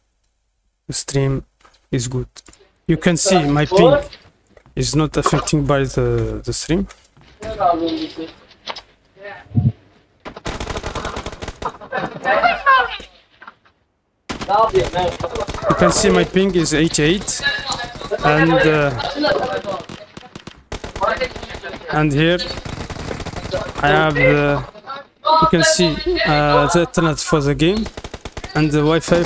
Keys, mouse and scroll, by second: 2.4 click, 2.7 right click, 2.8-7.0 typing, 9.0-12.4 typing, 14.5 click, 15.3 right click, 15.6 right click, 16.0-20.1 typing, 21.2 d, 21.7 a, 24.0 click, 27.1 click, 28.4 click.